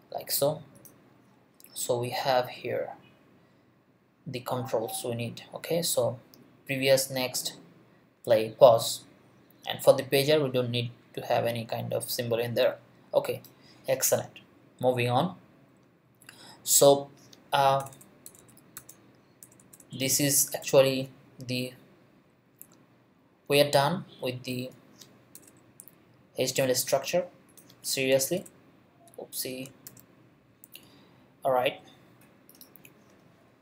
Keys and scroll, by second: 17.8 BackSpace, 25.4 BackSpace, 28.1 BackSpace, 29.8 shift+..